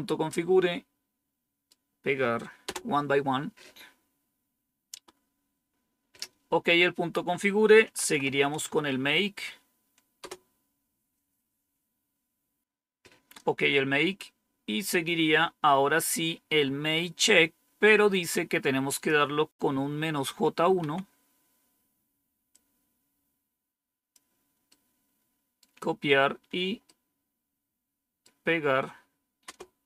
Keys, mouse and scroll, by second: 0.2-2.3 right drag, 2.6 Return, 7.5-8.7 typing, 10.1 Return, 18.8 click, 20.1 Up, 20.7 Down, 22.4-24.0 drag, 24.6 right click, 26.7-28.1 right drag, 29.3 Return.